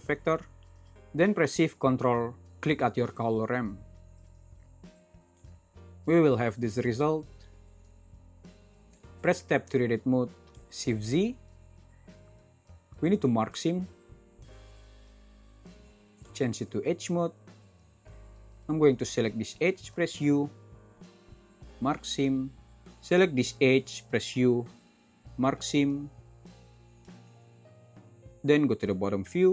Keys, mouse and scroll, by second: 1.0 super+z, 9.3 Tab, 10.5 shift+z, 10.9 shift+z, 18.6-19.9 middle drag.